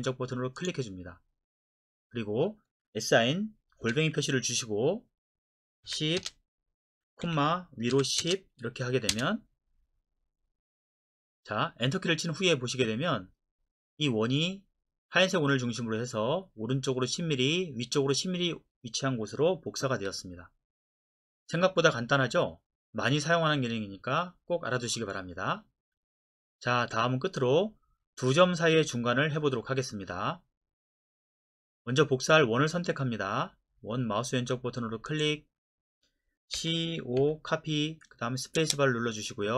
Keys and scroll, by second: 3.8 shift+2, 5.8 KP_1, 6.2 KP_0, 7.3 ,, 7.9 KP_1, 8.2 KP_0, 9.1 Return, 20.0 Escape, 36.5-37.2 typing, 38.6 space.